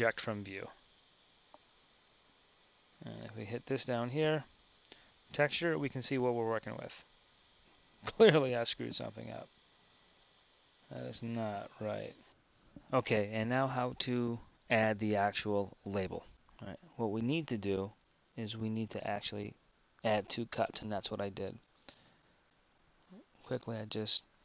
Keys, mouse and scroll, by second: 10.3 Tab, 11.5 Tab, 16.3 Tab, 16.3 z, 17.0 z, 22.2 a.